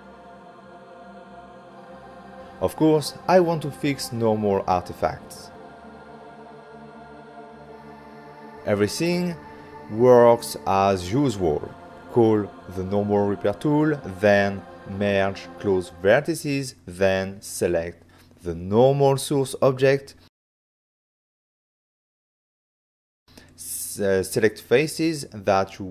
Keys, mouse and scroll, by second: 0.1 f, 0.7 click, 1.6-2.6 typing, 3.0 click, 4.2 f, 4.5 click, 4.7 ctrl+middle click, 5.2 middle click, 7.5 middle click, 8.7 ctrl+middle click, 9.2 middle click, 10.6 ctrl+middle click, 11.7 middle click, 12.4 f, 13.6 click, 17.1 ctrl+middle click, 22.0 click, 22.5 ctrl+middle click, 24.1 click, 24.7 middle click, 25.0 c, 25.5 click.